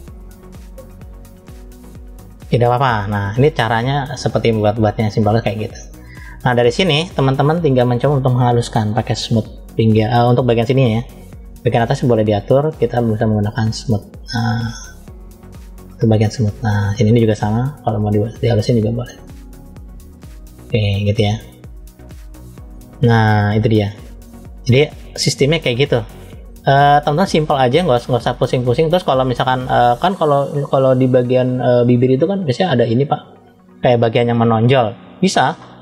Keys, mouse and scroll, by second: 2.9-3.4 scroll down 2, 3.4 middle click, 4.6-5.2 scroll up 2, 5.2 middle click, 6.5 middle click, 7.3 scroll up 1, 8.7 click, 11.1 f, 12.8 click, 17.2 click, 21.2 click, 24.0-25.1 middle drag, 25.8 middle click, 26.9-27.6 scroll up 1, 27.6 middle click, 30.3 click.